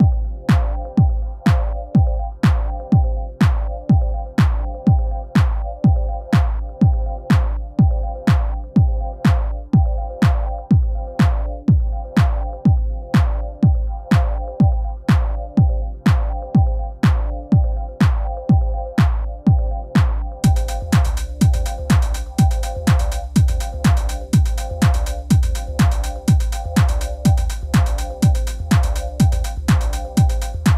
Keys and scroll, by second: 8.2 super+c, 8.3 super+v, 18.4 d.